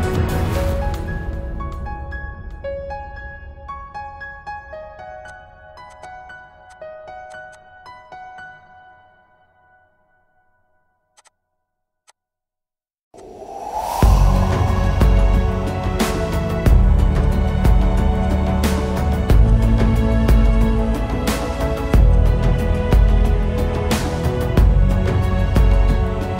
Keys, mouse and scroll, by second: 2.1 ctrl+s, 4.6 ctrl+shift+s, 5.9 double click, 7.5 double click, 11.2 double click, 12.4 BackSpace, 14.0 space, 15.2 Return, 17.9 right click, 19.8 right click, 22.0 double click, 25.5 alt+scroll down 1.